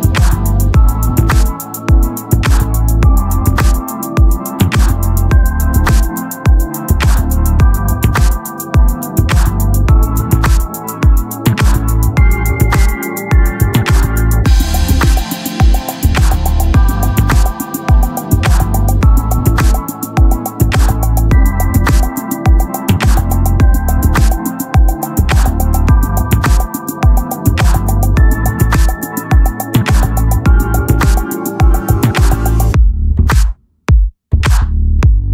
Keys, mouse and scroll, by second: 0.9-2.1 drag, 4.7-6.6 drag, 6.1 Tab, 6.8 Tab, 7.5 click, 9.5 z, 10.1 ctrl+Tab, 11.2 click, 11.2 x, 13.2 Tab, 13.7 z, 15.1 Tab, 15.8 KP_1, 17.2 z, 17.6 middle click, 17.9-19.4 drag, 18.1 c, 20.2-21.2 drag, 20.7 r, 22.7-25.2 drag, 25.8 c, 27.3-28.9 drag, 28.9 r, 29.8-33.6 drag, 32.5 c, 33.9 middle click, 34.6-35.3 drag, 34.6 right click.